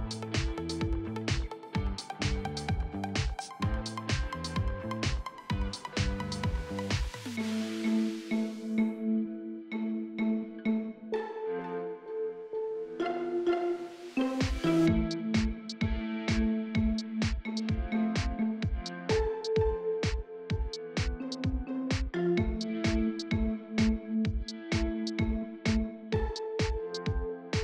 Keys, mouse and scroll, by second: 1.0 Return, 6.2 5, 6.3 Return, 7.3 4, 7.4 Return, 10.9-12.6 scroll up 1, 12.6 click, 12.9 scroll down 1, 15.3 scroll up 1, 18.5 click, 18.9-19.5 scroll down 1, 20.3 right click, 20.7 scroll down 1, 21.1 Return, 21.5-23.6 drag, 24.2 Delete, 25.4 click, 25.9 scroll down 1, 26.2 right click, 27.5 click.